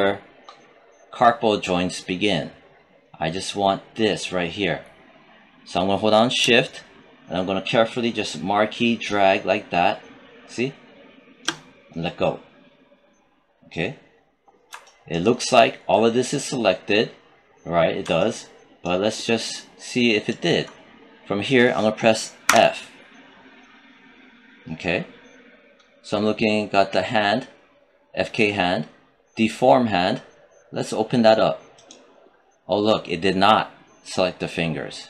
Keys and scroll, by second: 22.3 f.